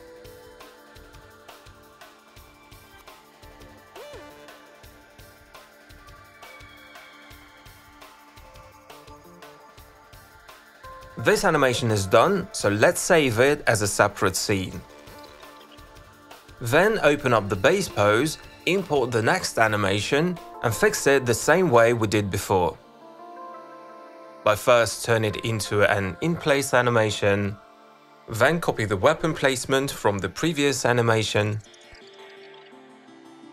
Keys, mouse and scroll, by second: 0.2 ctrl+alt+click, 1.6 w, 3.0 click, 3.2 ctrl+alt+click, 3.8 ctrl+alt+click, 6.8 click, 8.2 click, 8.4 click, 8.8 click, 9.1 click, 10.1 click, 11.0 click, 11.5 click, 14.2 typing, 15.3 click, 16.9 click, 17.4 click, 18.9 click, 19.4 click, 19.7 click, 21.1 alt+click, 21.4 click, 21.6 ctrl+c, 21.9 click, 22.5 ctrl+v, 24.6 click, 25.2 click, 26.4 click, 26.9 click, 27.1 click, 27.3 click, 27.5 click, 27.6 click, 28.5 click, 28.6 click, 28.8 middle click, 29.2 ctrl+c, 29.3 click, 29.9 ctrl+v, 32.0 click, 32.1 click, 32.7 click.